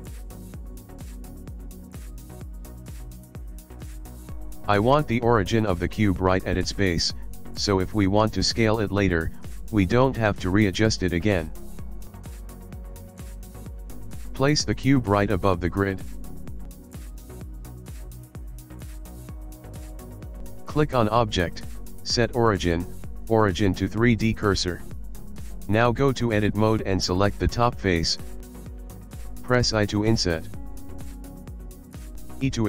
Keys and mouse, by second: 0.9 s, 2.7 middle click, 3.4 g, 5.1 middle click, 7.7 middle click, 9.3 middle click, 9.7 ctrl+KP_1, 10.3 ctrl+middle click, 11.3 shift+middle click, 12.0 ctrl+middle click, 12.3 middle click, 12.3 KP_1, 12.6 shift+middle click, 14.2 g, 19.2 middle click, 20.0 ctrl+middle click, 20.9 middle click, 22.0 click, 24.4 middle click, 25.6 click, 26.0 Tab, 26.4 click, 30.0 i.